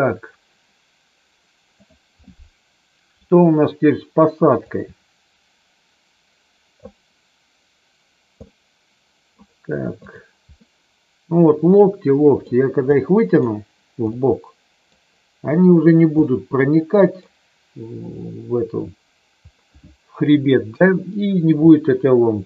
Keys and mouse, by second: 1.8 click, 4.6-6.8 drag, 8.4 middle click, 10.4-12.4 middle drag, 12.9 middle click, 14.1 middle click, 16.2-17.2 middle drag, 20.7 KP_3, 21.6-22.4 shift+middle drag.